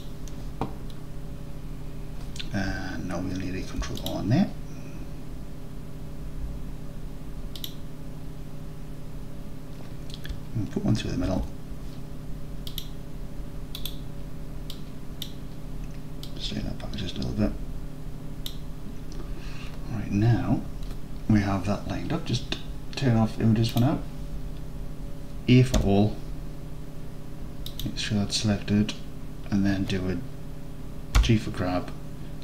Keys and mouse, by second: 3.7 ctrl+r, 7.7 click, 11.3 ctrl+r, 13.9 click, 14.8 click, 16.4-18.5 drag, 23.7 click, 25.8 a, 27.9-29.1 drag, 31.2 g.